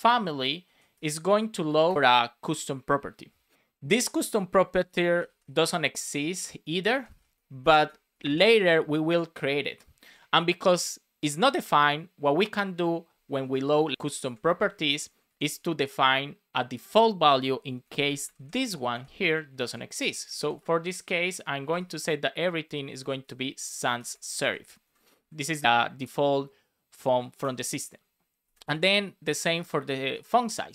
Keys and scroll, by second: 0.6 Down, 0.9 Return, 1.9 shift+9, 10.0 space, 13.4 Right, 13.7 alt+shift+Left, 15.0 Right, 15.2 Left, 17.8 Left, 19.2 alt+shift+Right, 19.6 shift+Left, 20.1 super+Right, 20.3 Left, 20.9 Left, 23.9 BackSpace, 24.8 Right, 25.3 Right, 27.3 Return, 30.1 BackSpace, 30.3 Return.